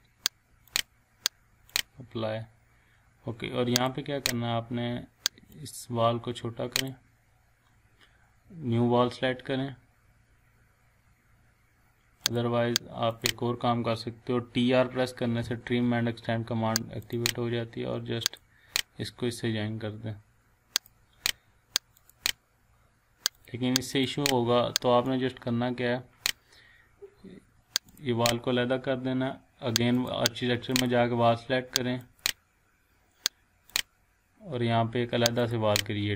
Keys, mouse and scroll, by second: 0.7 click, 3.0 scroll up 1, 3.7 click, 4.4 scroll up 1, 5.5-7.1 drag, 12.2 click, 15.0-15.9 typing, 17.0 click, 19.7 click, 20.8-26.3 drag.